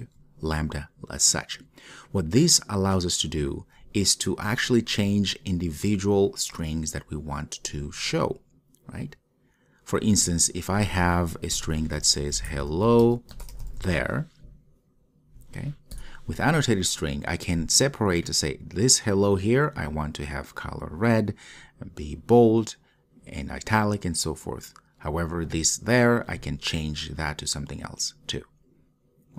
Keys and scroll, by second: 0.0 Return.